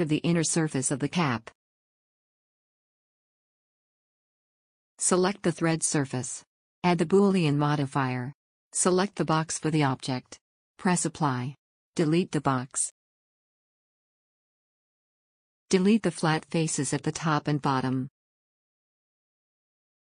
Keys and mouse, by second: 6.2 Tab, 6.6-12.5 drag, 13.1 click, 13.3 x, 14.8-15.7 middle drag, 16.9 Tab, 19.4 middle click.